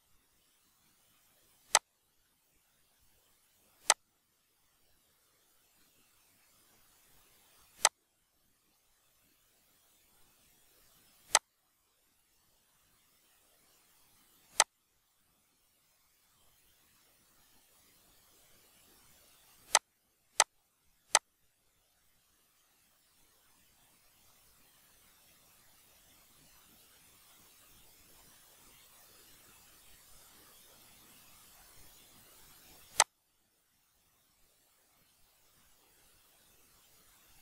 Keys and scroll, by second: 8.8 ctrl+d, 34.0 shift+m.